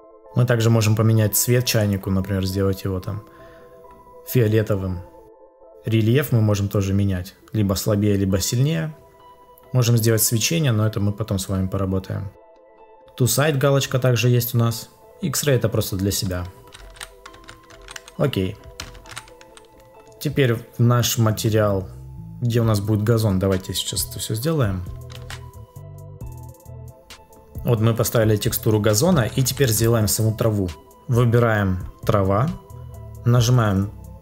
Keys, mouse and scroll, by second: 25.1 ctrl+s.